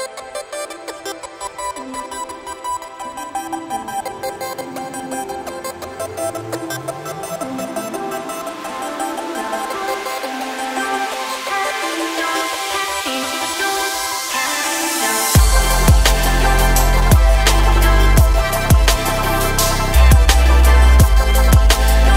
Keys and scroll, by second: 0.9 s, 12.2 g, 12.6 z, 14.6 Tab, 17.2 KP_1.